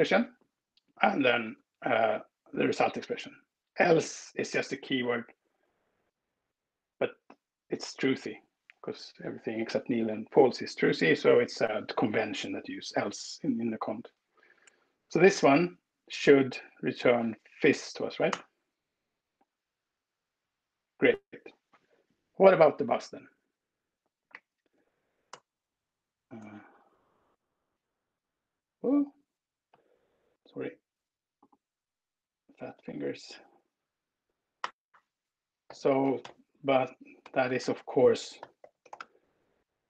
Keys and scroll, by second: 0.0 Right, 0.2 Right, 0.5-0.8 Right, 18.1 alt+Return, 21.1 Up, 21.5 Left, 22.1 Left, 24.1 alt+Right, 25.4 Return, 26.5 super+z, 27.8 alt+super+Right, 33.3 alt+Right, 34.5 Return, 35.2-39.8 typing.